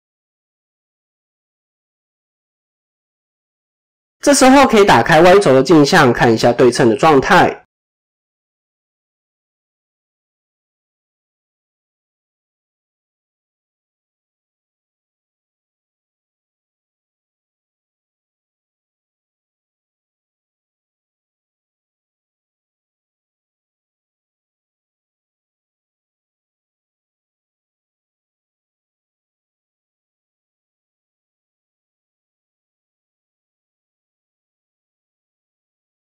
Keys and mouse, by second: 1.8 r, 4.7 click, 8.3 click, 11.7 KP_1, 12.1 KP_3, 12.9 ctrl+KP_3, 14.5 KP_7, 15.5 click, 16.8 KP_1, 16.8 KP_3, 17.5-19.6 drag, 20.2 KP_7, 21.1 click, 21.5 click, 22.4 ctrl+r, 23.5-24.5 drag, 24.8 KP_3, 25.8 click, 26.8 ctrl+z, 27.3 ctrl+z, 28.3 KP_7, 28.6 ctrl+z, 29.1 click, 29.9-33.0 drag, 33.5-34.6 drag, 35.2 KP_1, 35.6 KP_3.